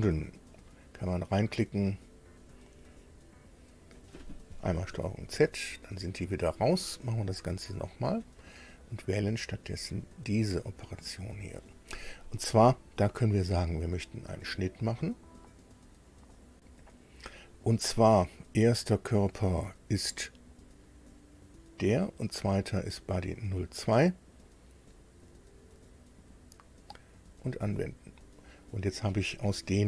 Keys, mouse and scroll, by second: 0.0 click, 2.3 click, 5.3 ctrl+z, 7.2 click, 7.7 shift+click, 9.8 click, 13.8 click, 27.4 click, 28.9 scroll up 2, 29.0 middle click, 29.1-29.4 scroll down 2.